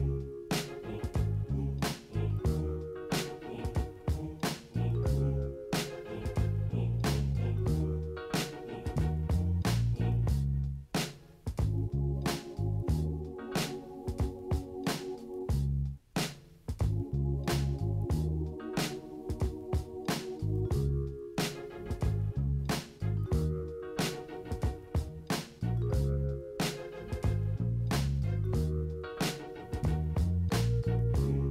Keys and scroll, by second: 0.2-0.7 typing, 1.2 ctrl+t, 1.9 -, 1.9 -, 2.1 -, 2.2 -, 4.9 ctrl+space, 6.3 ctrl+space, 6.4 ctrl+-, 6.5-7.5 typing, 7.8 ctrl+-, 7.9 ctrl+-, 9.2 Return, 9.3 ctrl+t, 12.9 ctrl+shift+i, 13.4 ctrl+z, 13.4 ctrl+space, 13.8 [, 13.9 [, 14.5 ctrl+space, 15.8 ctrl+-, 15.8 ctrl+-, 16.9 x, 18.0 typing, 19.7 ctrl+d, 31.4 typing.